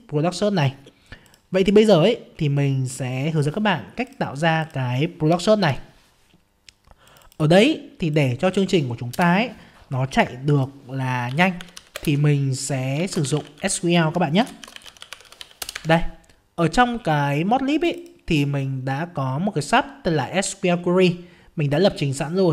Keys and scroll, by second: 5.6 alt+F11.